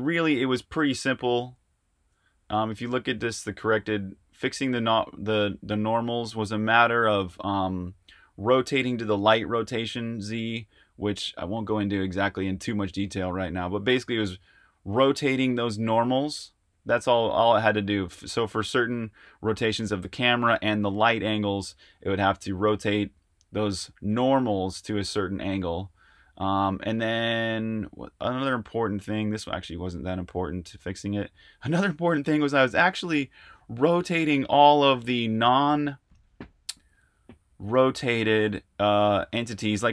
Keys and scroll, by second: 0.1 super+Tab.